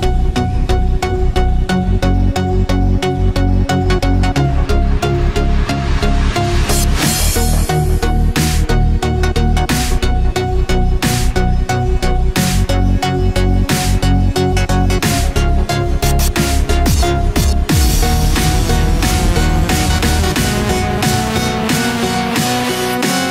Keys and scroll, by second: 3.8 ctrl+=, 5.4 ctrl+-, 5.7 ctrl+0, 6.3 ctrl+=, 15.6 ctrl+=, 21.2 ctrl+z.